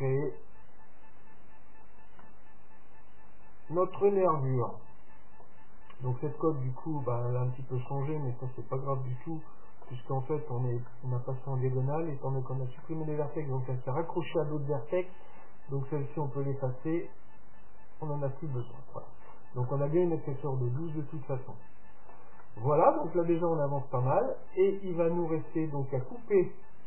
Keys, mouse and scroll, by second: 0.5 middle click, 1.7 middle click, 1.8 scroll up 1, 1.8-4.2 middle drag, 7.0-10.6 middle drag, 10.9-12.8 middle drag, 12.9-14.8 middle drag, 16.2-19.8 drag, 18.6 middle click, 19.2 middle click, 19.5-25.2 middle drag, 26.0 middle click.